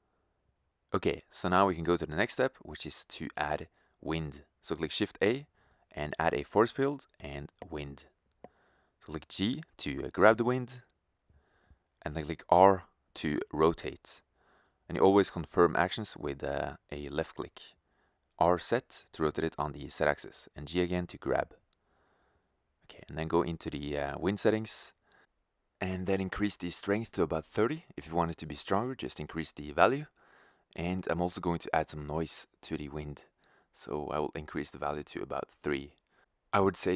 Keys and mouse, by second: 1.2 shift+a, 10.3 g, 12.7-14.0 drag, 14.5 r, 16.9 r, 18.6 click, 19.2 g, 20.2-20.5 drag, 20.6 click, 20.6-22.5 right drag, 22.9 click, 26.4-28.2 drag, 33.5-35.4 drag.